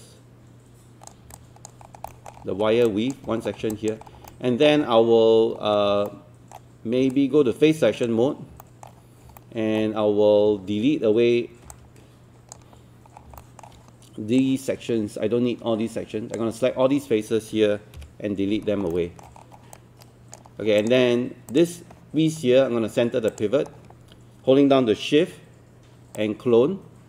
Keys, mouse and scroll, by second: 1.4 alt+click, 2.1 alt+middle click, 2.4-2.9 scroll up 2, 2.9 alt+click, 3.3 scroll down 1, 3.7 alt+click, 4.1 scroll up 1, 4.3 alt+middle click, 5.6-5.9 scroll down 1, 6.1 alt+middle click, 7.1 right click, 8.6 alt+middle click, 9.4 alt+middle click, 11.7-13.0 drag, 13.1 scroll down 1, 13.4 alt+middle click, 14.4-17.0 drag, 18.0 Delete, 18.9 alt+middle click, 19.5 scroll up 1, 19.7 right click, 20.8 click, 26.2-27.0 shift+drag.